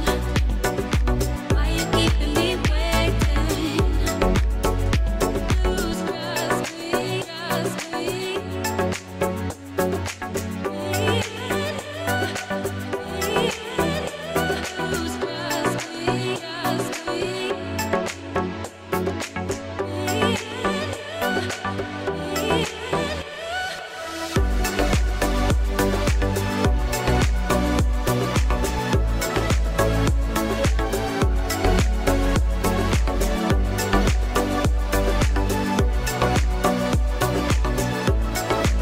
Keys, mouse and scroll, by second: 0.9 click, 2.6-4.3 drag, 4.8 middle click, 4.9 click, 6.0 click, 7.0-8.0 drag, 8.6 click, 10.9-11.9 drag, 15.7-16.9 drag, 17.8 KP_3, 18.9 shift+middle click, 20.0 r, 23.5 click, 23.5 middle click, 24.5 shift+middle click, 25.4 click, 25.9 drag, 26.1 shift+click, 26.3 Tab, 26.6 drag, 26.9 click, 27.1 shift+s, 27.6 Tab, 27.8 click, 28.6 click, 29.0 click, 29.7 KP_3, 29.9 r, 30.6 click, 30.9 shift+click, 31.2 shift+click, 31.7 g, 33.4 click, 33.7 middle drag, 34.2 shift+middle click, 34.4 middle click, 35.4-35.7 middle drag, 36.1 middle click, 36.7 g, 38.6 middle click.